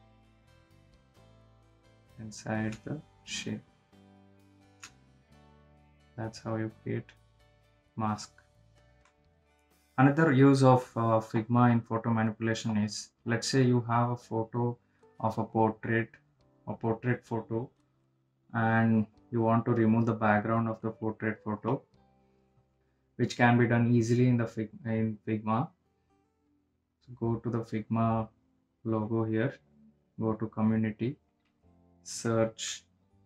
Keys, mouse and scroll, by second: 10.2 click, 10.3 click, 14.5 click, 20.9 click, 24.5 click, 29.5 click, 29.6 click, 31.6 click.